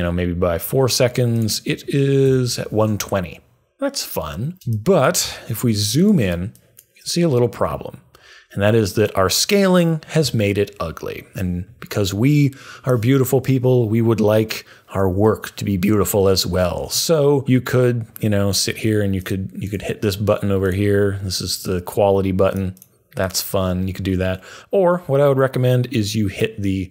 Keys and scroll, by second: 2.1 Up, 2.2 Up, 4.5 super+z.